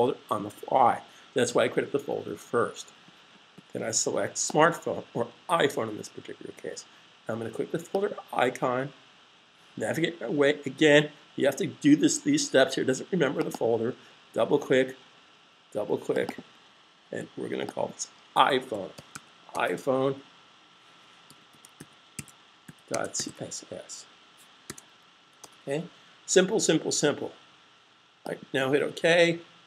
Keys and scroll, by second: 18.7-19.2 typing, 21.0-23.0 typing, 24.5 typing.